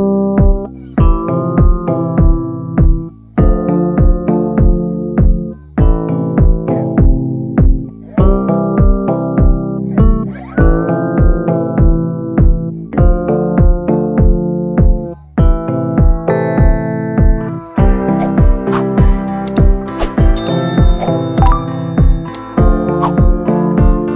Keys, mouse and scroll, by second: 8.4 ctrl+=, 8.6 ctrl+=, 8.7 ctrl+=, 20.5 ctrl+j, 21.4 ctrl+t.